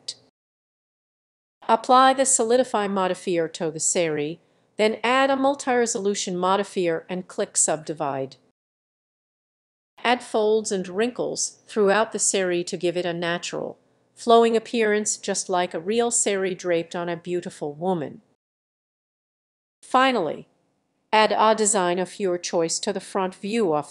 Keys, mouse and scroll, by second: 0.0-1.1 drag, 1.1 middle click, 1.8 click, 2.1 ctrl+z, 2.7-6.0 drag, 6.4-9.4 drag, 9.4 ctrl+z, 10.0-12.4 drag, 12.4-13.8 middle drag, 13.8 click, 14.2 middle click, 14.8-15.9 drag, 15.9 middle click, 16.8 click, 17.8 click, 18.5 middle click, 18.6-23.9 drag.